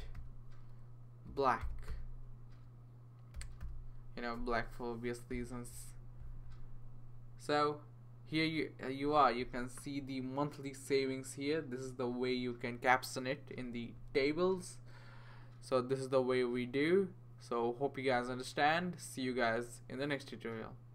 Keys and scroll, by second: 0.0-4.1 typing, 5.3 ;.